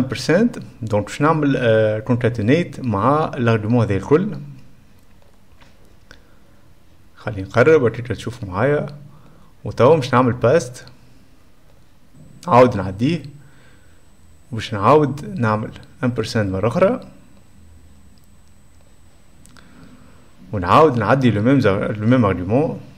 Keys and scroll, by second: 0.1 shift+7, 15.9-17.3 typing, 18.8 shift+7.